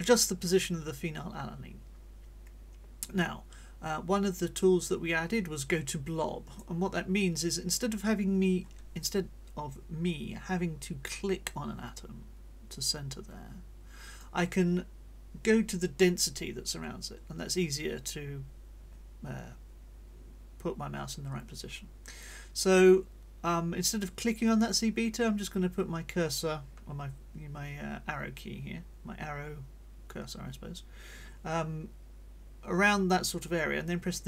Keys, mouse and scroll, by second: 12.7-14.4 drag.